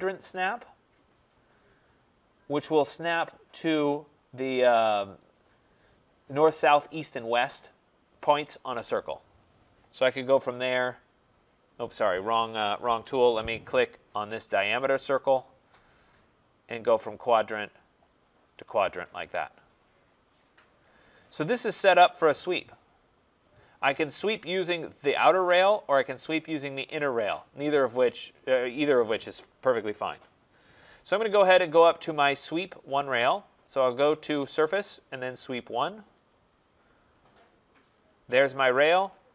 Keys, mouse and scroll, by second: 1.0 click, 3.0 click, 9.6 click, 12.3 Escape, 14.9 click, 16.8 click, 18.6 click, 19.3-20.0 scroll, 20.8 right click, 21.2-23.6 scroll, 25.0 click, 26.7 click, 31.3 click, 34.6 click, 36.2 click, 38.0 click.